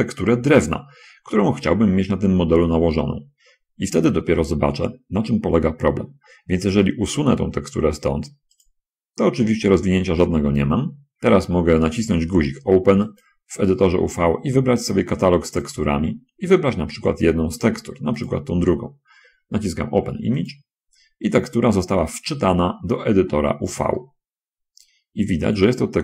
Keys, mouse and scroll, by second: 16.1 click, 18.5 click, 20.8 click, 22.6-24.0 scroll down 4, 24.0-26.0 middle drag.